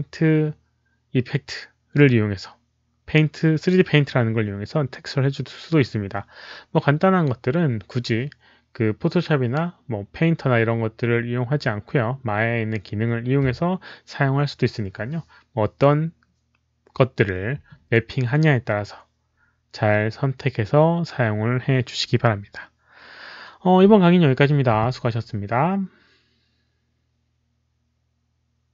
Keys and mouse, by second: 1.7 alt+click, 28.6 click.